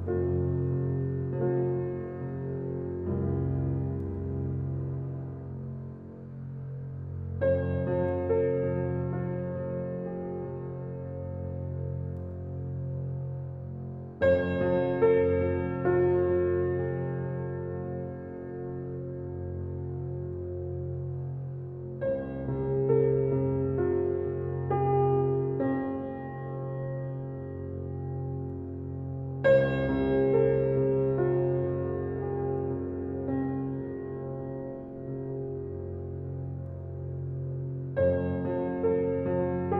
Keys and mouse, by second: 0.0 click, 1.1 click, 3.0 ctrl+z, 4.1-5.7 drag, 6.7 ctrl+alt+click, 7.3 alt+shift+click, 7.8 ctrl+alt+click, 9.4 click, 10.6 click, 11.6 click, 12.3 ctrl+z, 13.2 click, 13.9 click, 14.8-15.8 ctrl+alt+drag, 16.4 middle click, 18.0 alt+shift+click, 18.7 ctrl+alt+click, 19.7 ctrl+alt+click, 20.2-21.8 ctrl+alt+middle drag, 21.8-24.0 alt+drag, 25.1 alt+click, 25.5-27.9 alt+middle drag, 27.9 alt+click, 28.7 1, 29.1 ctrl+alt+click, 30.6 f, 31.0-33.3 drag, 33.5 click, 34.5 f, 34.9 click, 35.6 click, 36.0 click, 36.8 click, 37.2 click, 37.6-39.0 drag.